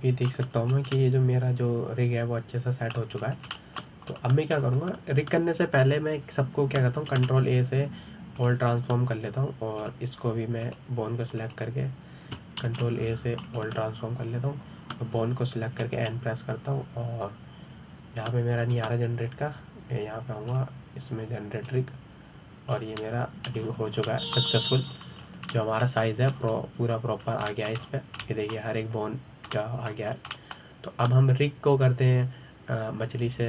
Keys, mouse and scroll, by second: 0.3-1.1 middle drag, 1.1 scroll down 2, 1.3-2.2 middle drag, 2.2-2.6 scroll up 1, 2.6-4.9 middle drag, 4.9 scroll down 2, 5.2-5.8 shift+middle drag, 5.8 click, 6.2-8.8 scroll up 2, 8.8 ctrl+a, 11.5 click, 12.3 click, 13.1 click, 14.3 ctrl+a, 15.2 click, 17.5 n, 20.4 n, 22.2 scroll down 2, 23.3-24.4 drag, 24.4 scroll down 2, 24.7-25.3 middle drag, 25.3-25.8 scroll up 4, 25.8-26.6 middle drag, 26.6-26.9 scroll up 2, 26.9 scroll down 2, 27.2-28.0 middle drag, 28.0 scroll up 3, 28.9 scroll down 2, 29.2 middle drag, 29.5-29.9 scroll up 2, 29.9-31.8 middle drag, 31.8 scroll down 3, 32.0-33.4 middle drag.